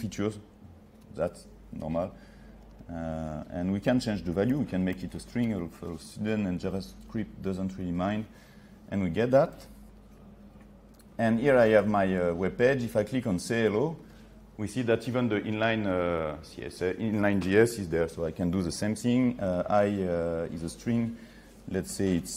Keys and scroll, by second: 1.1 F6, 7.7 F8.